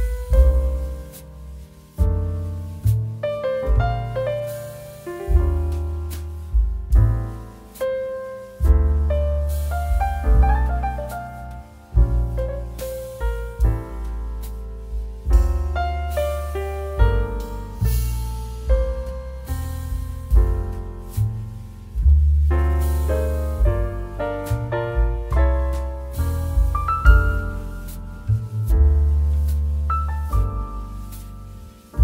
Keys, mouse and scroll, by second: 2.0 alt+click, 2.8 click, 15.3 alt+click, 16.4 click, 17.4 ctrl+b, 20.6 click, 27.0 alt+click, 27.8 s, 29.0 click, 31.6 3.